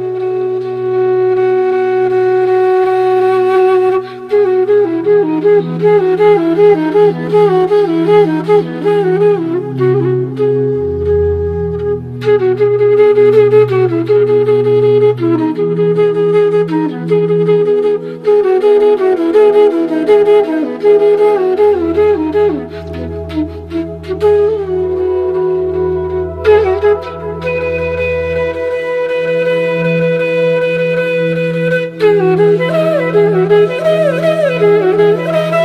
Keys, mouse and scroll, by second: 3.5 click, 4.3 click, 4.4 ctrl+j, 6.0 click, 8.6-16.2 drag, 16.2-21.0 drag, 21.6 alt+scroll up 1, 22.4-24.2 drag, 26.8-33.1 drag, 33.6 alt+scroll down 1, 34.4 click, 35.2-35.6 typing.